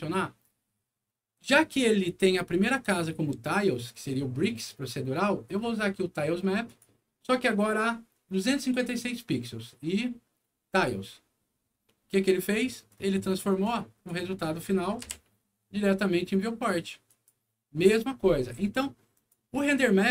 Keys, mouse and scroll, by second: 2.0-2.5 scroll up 2, 6.6 click, 8.3 click, 10.7 click, 12.8 click, 13.6 click, 14.5 middle click, 15.0 F9, 17.0 click, 19.1 click, 19.8 middle click.